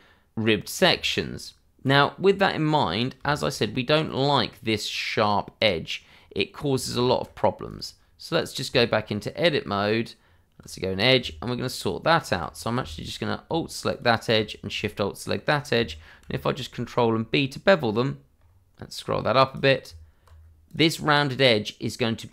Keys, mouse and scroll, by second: 0.5-0.9 scroll down 1, 1.0 shift+middle click, 1.8 scroll up 1, 3.2 shift+middle click, 4.0 click, 6.8 ctrl+z, 7.6 click, 8.6 Tab, 11.8 alt+click, 13.9 alt+shift+click, 14.8 middle click, 16.2 ctrl+b, 18.3-19.5 scroll up 1, 19.5 click, 19.8 Tab, 20.3 scroll down 1, 20.6 click, 20.9-21.2 scroll down 1, 21.2 middle click.